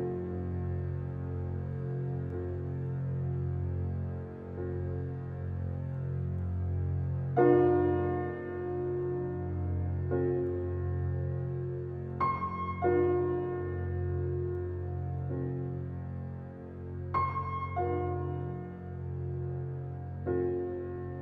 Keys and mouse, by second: 10.9 click, 11.0-17.2 drag, 15.6 o, 19.6-21.2 drag.